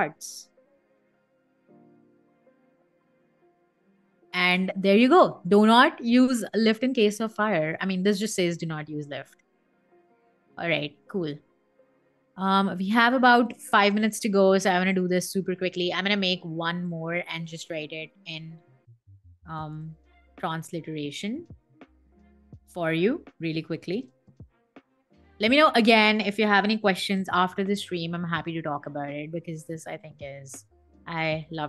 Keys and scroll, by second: 0.3 k, 0.8 r, 1.4 e, 2.3 n, 3.5 1, 4.1 Escape, 18.7 super+a, 19.0-20.4 typing, 21.6-25.3 typing, 26.3-28.2 typing, 28.2 Escape.